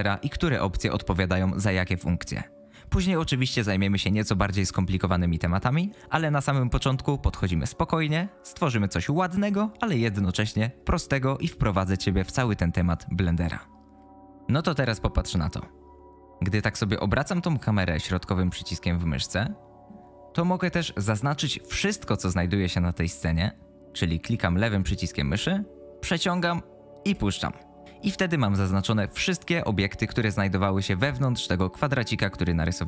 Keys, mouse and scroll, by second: 16.5-19.8 middle drag, 24.7-27.1 drag, 31.2-32.4 drag.